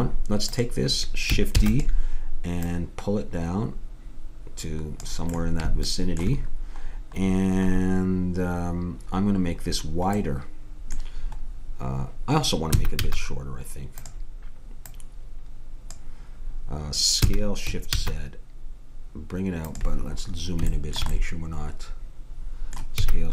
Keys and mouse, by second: 0.6-1.6 drag, 1.6 shift+d, 5.4-6.7 middle drag, 9.9 middle click, 12.7 s, 14.8-16.6 drag, 17.2 s, 20.5-22.0 middle drag, 23.0 s.